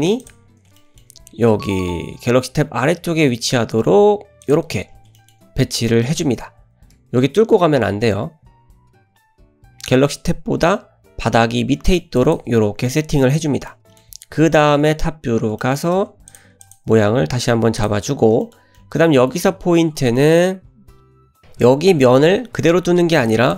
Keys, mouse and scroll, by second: 0.5-0.8 scroll up 2, 0.8 shift+middle click, 1.2-1.7 scroll up 3, 1.8 g, 4.7-5.2 scroll up 3, 5.2 shift+middle click, 6.2 scroll up 1, 7.0 g, 13.2-13.8 scroll down 5, 13.8-14.1 middle drag, 15.4 scroll down 3, 15.7 shift+middle click, 16.3 click, 16.7 click, 17.0 g, 18.1-18.4 scroll up 2, 18.5 shift+middle click, 18.8-19.4 middle drag, 19.4-20.0 scroll up 4, 20.0 shift+middle drag, 20.7-22.6 scroll down 2, 23.2 click.